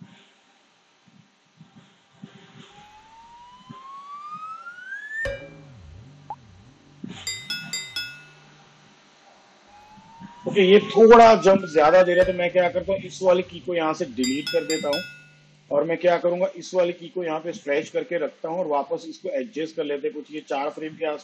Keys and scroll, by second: 10.6 space, 14.8 Delete.